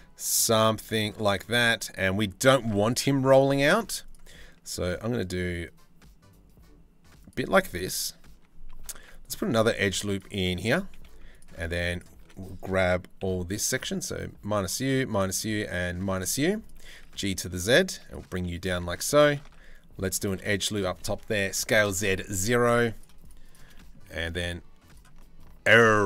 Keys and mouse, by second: 1.2 ctrl+r, 3.5 ctrl+r, 8.7 ctrl+r, 10.1 3, 10.5 2, 11.2 z, 11.8 1, 12.8 c, 15.9 z, 16.5 g, 17.9 3, 19.2 ctrl+r, 20.5 s, 22.4 3, 22.5 click, 23.8 e.